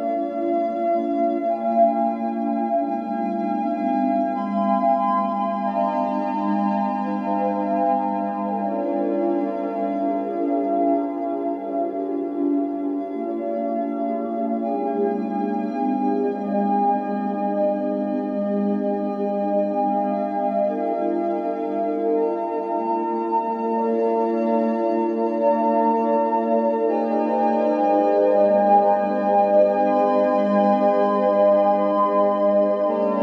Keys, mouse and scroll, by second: 0.0-10.5 typing, 11.5 click, 11.8-15.5 typing, 24.9-27.1 middle drag, 27.3 alt+middle click, 27.8 alt+middle click, 28.2 alt+middle click, 29.2 p, 29.7 Tab, 29.9 click, 30.1 g, 31.1 click, 31.4 shift+middle drag, 31.6-32.1 scroll up 3, 32.1-33.2 shift+middle drag.